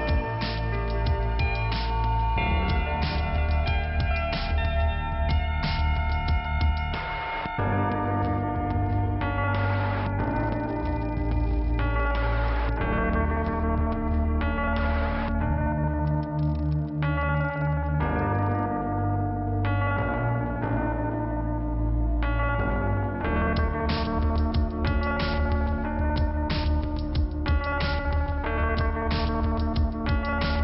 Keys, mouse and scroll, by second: 0.4 click, 2.2 click, 2.4 click, 2.9 scroll down 1, 4.6 click, 4.7 click, 6.1 click, 6.2 click, 7.1 click, 12.2 scroll up 1, 13.3 click, 14.1 click, 14.2 click, 16.3 click, 17.5 click, 18.7 scroll down 1, 19.5 scroll up 1, 19.7 scroll down 1, 20.1 click, 20.2 click, 20.7 click, 21.7 click, 22.5 click, 22.6 click, 23.4 click, 24.5 scroll down 1, 25.5 click, 25.6 scroll down 1, 25.8 click, 26.8 click, 27.8 click, 29.6 click, 29.7 click, 30.2-30.6 scroll down 2.